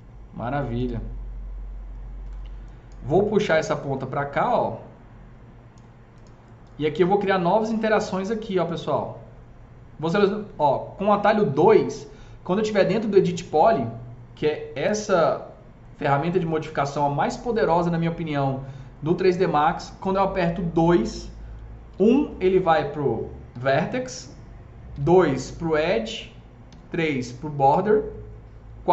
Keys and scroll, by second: 4.5 s, 11.4 2, 22.0 1.